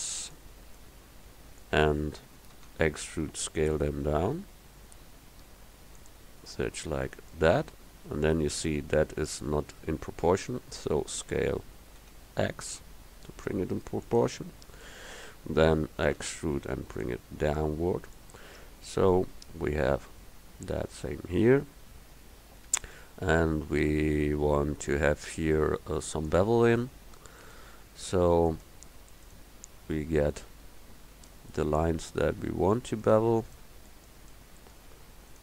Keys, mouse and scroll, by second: 0.8-2.7 middle drag, 2.7 e, 11.3 s, 16.2 e, 18.5 Tab, 23.0 Tab, 26.3-27.5 drag, 31.0 click.